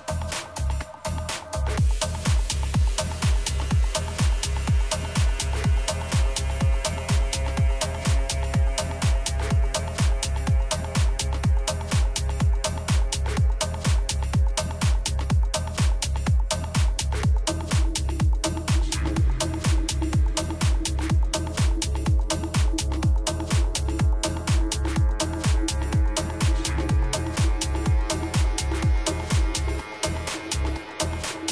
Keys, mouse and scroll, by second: 0.1 Tab, 0.6-3.1 middle drag, 3.5 a, 5.1-6.4 middle drag, 7.5 z, 8.2-10.7 middle drag, 13.6 KP_3, 14.4 z, 15.1 z, 15.4-17.5 middle drag, 15.9 a, 23.9 a, 24.3 a, 25.1 Tab, 25.8 a, 26.3 a, 26.7 a, 27.2-29.0 right drag, 30.6-31.5 drag.